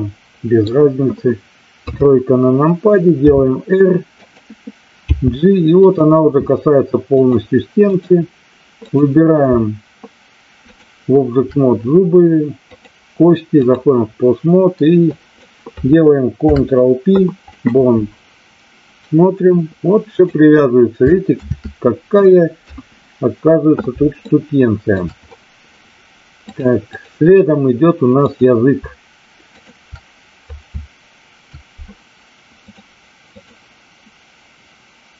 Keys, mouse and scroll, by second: 1.8 KP_3, 3.1 r, 4.1 click, 5.0 g, 5.8 click, 7.3 click, 8.8 click, 10.7 shift+click, 12.7-13.8 drag, 15.0-15.4 drag, 18.9-20.1 drag, 21.3 ctrl+z, 22.5 KP_3, 24.3-24.9 shift+middle drag, 26.7 click, 28.1 click, 29.5 shift+click, 32.8 click.